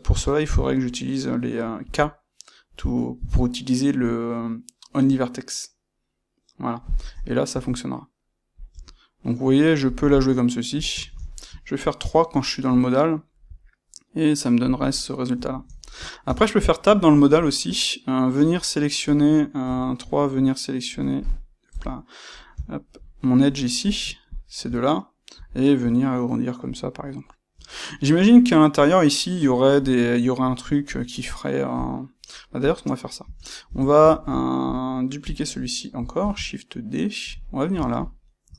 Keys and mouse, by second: 10.0-23.8 middle drag, 21.6 KP_1, 23.8 click, 23.8 middle click, 24.2 shift+click, 24.3 middle click, 25.2 g, 26.7-30.7 middle drag, 26.7 click, 31.8 click, 32.6 click, 33.2 Tab, 34.1-35.2 ctrl+shift+middle drag, 35.2 click, 36.2 shift+d, 37.2 click, 37.4-38.5 ctrl+middle drag.